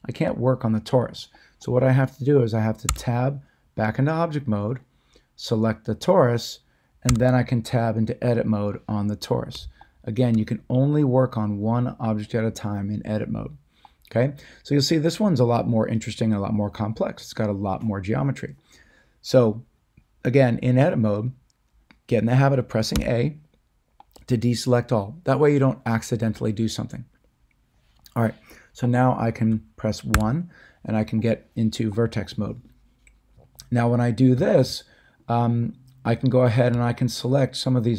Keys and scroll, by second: 2.8 Tab, 7.0 Tab, 8.3 Tab, 22.9 a, 30.1 1.